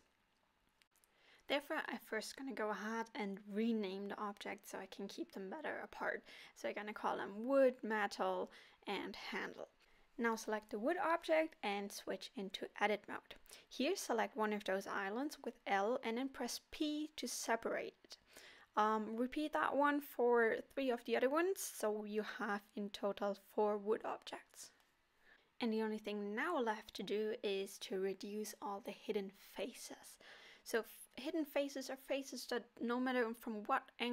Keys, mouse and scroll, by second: 0.5 click, 0.9 scroll up 1, 1.1 click, 1.3 click, 1.7 middle click, 8.0 click, 8.5 middle click, 9.0 Tab, 9.4-11.0 scroll up 1, 12.2 l, 16.0 p, 18.6 l, 19.3 p, 20.7 l, 21.6 p, 22.9 alt+a, 23.6 Tab, 23.9 click, 25.0 click, 26.7 click, 27.1 click, 27.6 click, 28.0 click, 28.3 click, 28.5 click, 29.1 click, 29.3 middle click, 29.7 middle click, 30.2 scroll down 1, 30.4 click, 30.9 middle click, 31.9 click, 32.8 middle click.